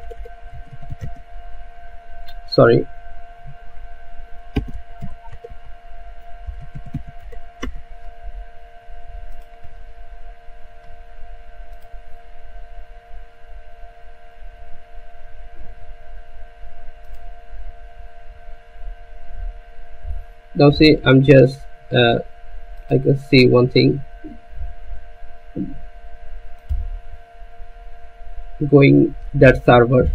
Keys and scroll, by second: 0.0-0.8 typing, 1.6 Return, 4.8-7.8 typing, 7.9 Return.